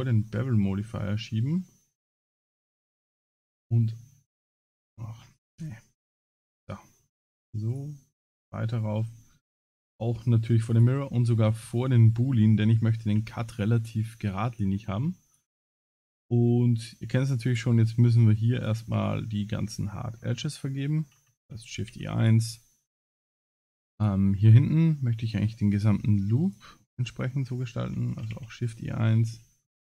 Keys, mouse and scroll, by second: 0.2-0.9 scroll up 8, 1.7 scroll up 1, 2.9 click, 4.1 scroll up 4, 5.2 scroll down 10, 6.4 click, 7.7 click, 8.3-9.4 scroll up 24, 10.7 click, 11.9 middle click, 12.7 scroll up 3, 13.2 Tab, 13.6 middle click, 14.7 2, 15.3 alt+click, 17.5 alt+shift+click, 19.1 scroll down 4, 19.6 shift+middle click, 21.7 shift+e, 22.7 middle click, 23.9 alt+click, 24.4 middle click, 25.7 alt+shift+click, 26.4 alt+shift+click, 28.1 shift+e, 28.9 scroll up 2, 29.4 shift+middle click.